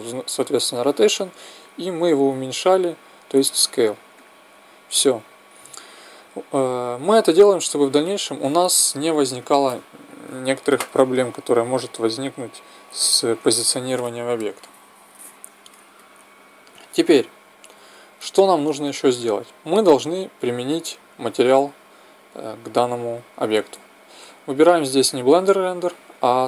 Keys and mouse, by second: 4.3-6.1 drag, 8.8 t, 12.6-17.0 middle drag, 18.2-20.6 middle drag, 20.6-23.0 drag, 25.5-26.4 drag.